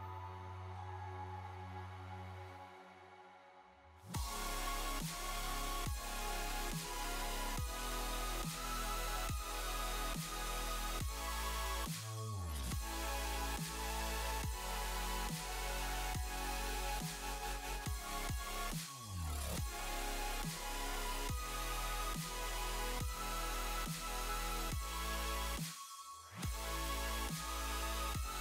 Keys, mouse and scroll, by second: 0.4 click, 0.6 middle click, 1.1 click, 1.4 middle click, 4.5 shift+middle click, 4.9 click, 5.1 middle click, 5.6 click, 7.6 click, 9.1 click, 9.6-10.0 scroll down 5, 10.7-12.0 scroll down 9, 10.7 click, 11.2 click, 12.3 click, 13.7 click, 13.9 middle click, 14.4 space, 17.3 space, 18.2 middle click, 19.7 click, 19.9 middle click, 20.3 click, 20.4 Tab, 20.6 middle click, 21.8 a, 23.5 alt+j, 24.0 ctrl+t, 24.7 alt+j, 26.2 ctrl+r.